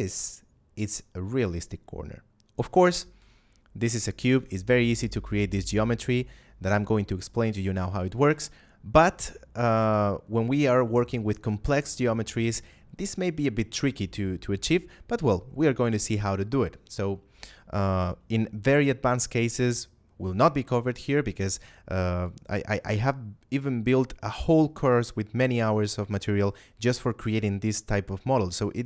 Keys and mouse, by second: 3.1 Tab, 3.9 shift+middle click, 4.2 a, 5.5 shift+middle click, 7.9 shift+middle click, 8.9 middle click, 9.3 shift+middle click.